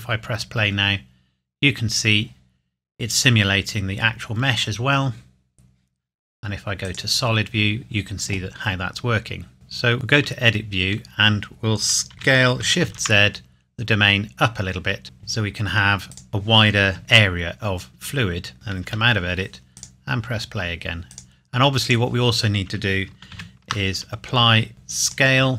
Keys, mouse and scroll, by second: 6.8 click, 9.8 click, 9.9 Tab, 10.6-11.3 scroll down 1, 12.1 s, 12.9 shift+z, 16.1 click, 18.8 Tab, 19.8 click, 23.3 ctrl+a, 25.1 click.